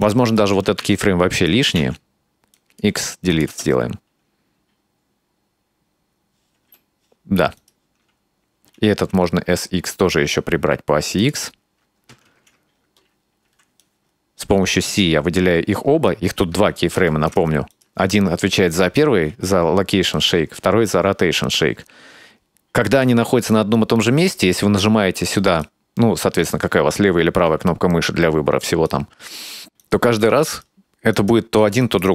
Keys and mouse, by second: 0.0-0.4 right drag, 0.8 c, 1.8 x, 3.3 click, 3.5 space, 6.6 space, 7.6 right click, 8.6 s, 12.3 ctrl+z, 13.5 c, 16.1-17.4 right drag, 17.1 ctrl+z, 17.7 right click, 25.5 right click, 28.6 right click, 29.8 right click, 30.5 right click, 31.1 right click, 31.8 right click.